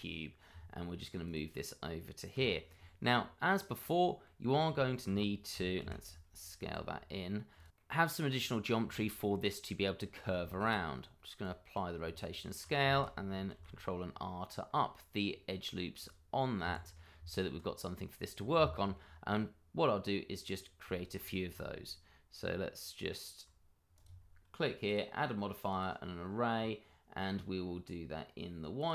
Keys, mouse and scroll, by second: 0.1 click, 2.3 g, 3.6 click, 4.0 middle click, 4.5 scroll up 1, 4.7 shift+middle click, 5.5 s, 5.8 y, 6.6 x, 7.5 click, 7.7 middle click, 8.3-8.8 scroll up 1, 8.9 shift+middle click, 9.0 middle click, 9.9-10.4 scroll up 1, 10.4 ctrl+a, 11.4 click, 12.0 Tab, 13.5 ctrl+r, 14.1-16.0 scroll up 1, 16.0 click, 16.6 Escape, 17.5 Tab, 17.8-18.1 scroll down 1, 18.4 middle click, 20.4 click, 20.9 shift+middle click, 23.9 click, 28.8 click.